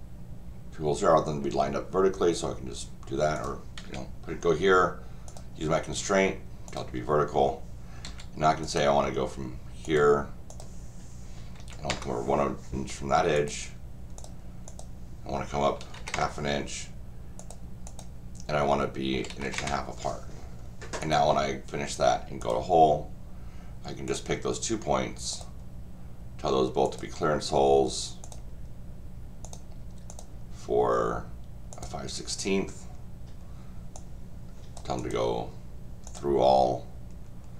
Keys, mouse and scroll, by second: 3.3 click, 5.3 click, 6.7 click, 8.0 d, 8.6 click, 9.8 click, 10.5 click, 13.3 click, 14.2 click, 14.7 click, 17.4 click, 17.8 click, 21.0 click, 22.4 click, 24.1 click, 25.3 click, 26.8 click, 28.2 click, 29.4 click, 30.1 click, 31.7 click, 33.9 click, 35.0 click, 36.1 click.